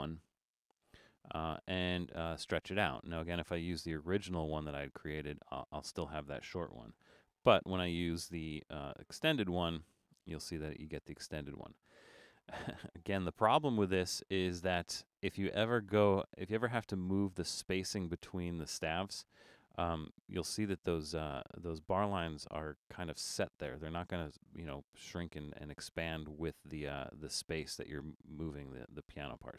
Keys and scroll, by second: 7.0 BackSpace, 28.9 super+z.